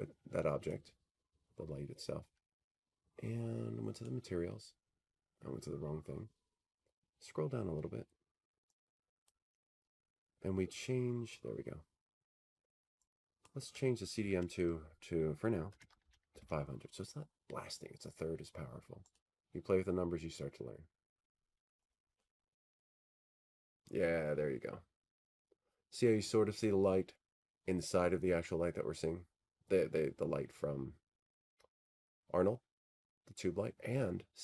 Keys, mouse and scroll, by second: 1.5-3.7 drag, 6.4-8.4 drag, 9.7-11.6 drag, 12.5-14.9 scroll down 8, 14.9 click, 14.9-15.3 scroll down 2, 15.5-16.3 scroll down 17, 16.3-17.1 scroll up 12, 17.1-18.0 scroll, 19.1 click, 21.3-22.0 typing, 25.0-27.0 drag, 27.5-29.7 drag.